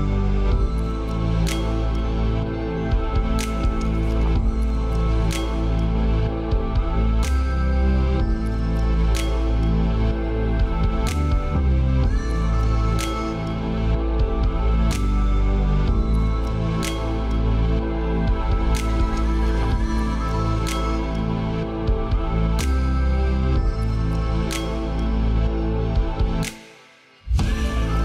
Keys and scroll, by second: 21.7 ctrl+z, 27.9 ctrl+space.